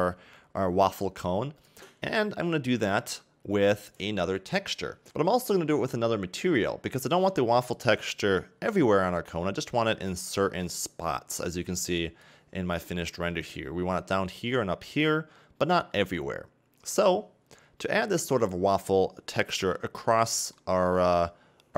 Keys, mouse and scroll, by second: 5.1-19.8 scroll up 1, 19.8-20.2 scroll up 1, 20.2 middle click.